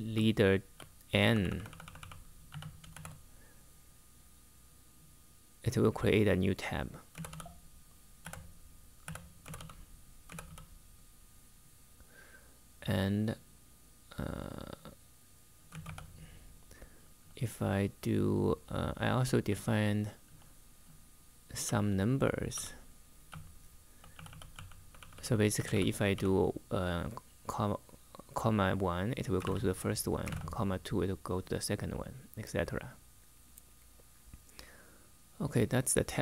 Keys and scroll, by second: 0.0-3.2 typing, 6.6-10.7 typing, 15.2-16.7 typing, 17.8-26.2 typing, 27.6-30.5 typing.